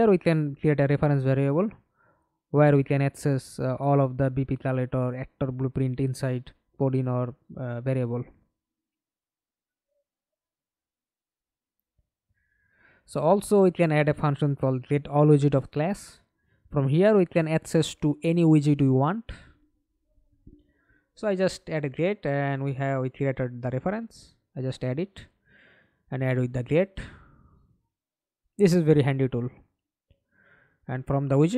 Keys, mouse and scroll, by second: 3.6 right click, 4.3-5.2 scroll down 1, 5.2 scroll down 1, 5.8-8.2 scroll down 1, 8.2 Delete, 8.5-9.3 typing, 10.4-12.7 typing, 12.9 Return, 19.0-19.8 typing, 19.9 Return, 21.8 double click, 23.2 right click, 26.9 right click, 27.5-30.5 scroll up 5, 30.5 right click.